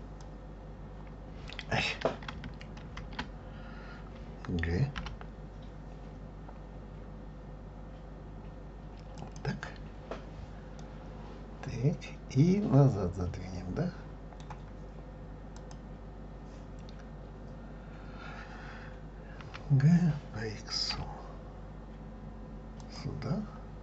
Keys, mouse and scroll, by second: 0.2-2.8 drag, 2.8 ctrl+z, 5.0 g, 10.8-13.9 middle drag, 15.6 click, 19.5 g.